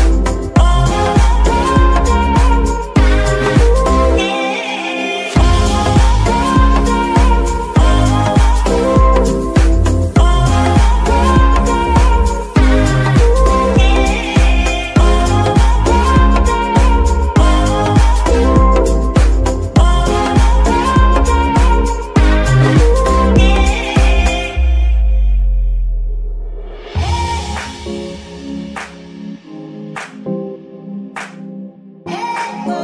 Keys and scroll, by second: 14.4 y, 17.6 g, 17.7 y, 25.4 shift+KP_3, 25.9 g, 26.8 s, 30.1 g, 31.2 r.